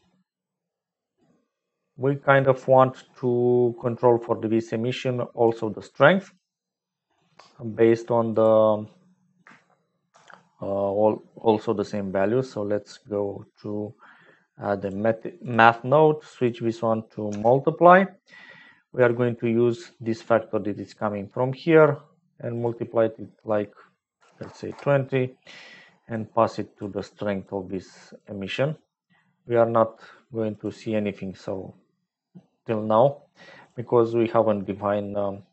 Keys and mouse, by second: 5.0-7.3 drag, 8.3 click, 10.1 shift+a, 14.8 click, 16.4-17.4 drag, 18.8 middle click, 18.8 click, 20.1 click, 22.8-25.4 drag, 26.1 click, 27.4 click, 30.5 click.